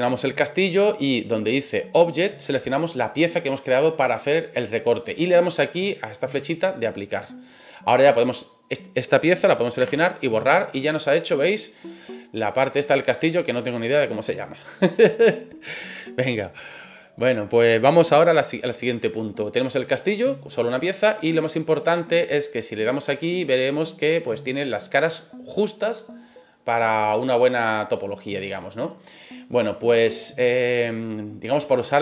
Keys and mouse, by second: 6.3-7.0 drag, 8.1 right click, 9.8 Delete, 10.5-14.7 middle drag, 20.4 click, 21.2-21.6 middle drag, 22.9 click, 23.4-28.4 middle drag, 29.4 click.